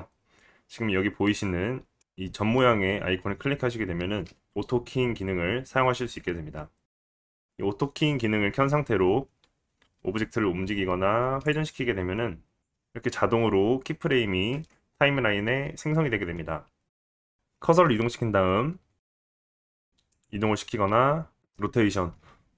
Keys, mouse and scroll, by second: 10.0 g, 12.0 r, 12.6 click, 17.2-20.2 drag, 19.9 g, 20.9 r, 22.1 s.